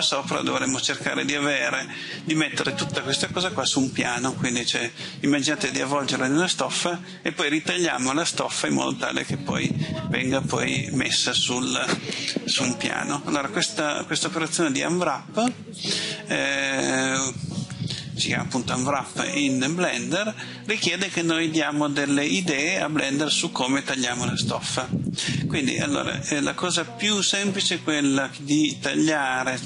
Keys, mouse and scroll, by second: 29.0 click.